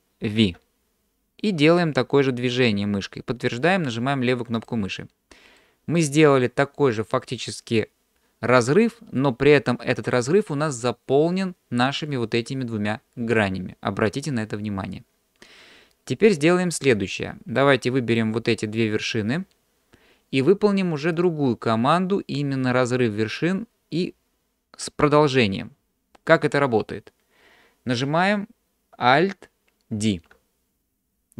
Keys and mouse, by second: 0.4 alt+v, 5.6 middle click, 16.1 shift+middle click, 17.2-18.2 middle drag, 18.8 click, 21.2-26.5 drag, 30.0 alt+d.